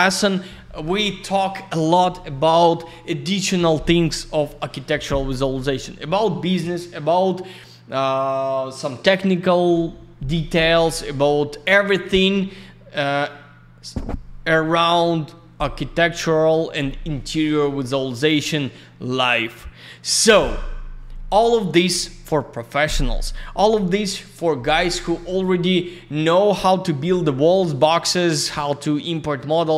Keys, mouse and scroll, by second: 12.5 click, 26.2 click, 27.2 click, 28.3 click.